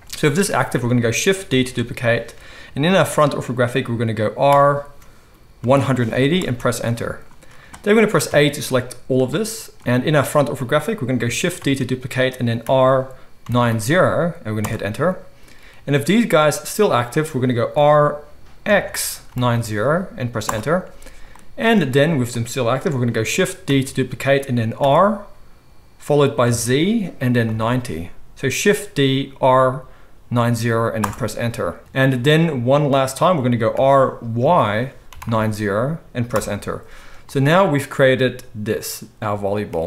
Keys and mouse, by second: 1.4 shift+d, 8.2 a, 11.6 shift+d, 17.7 r, 20.8 right click, 21.3-36.3 drag, 23.7 shift+d, 33.7 r, 36.3 right click, 37.1-39.8 drag.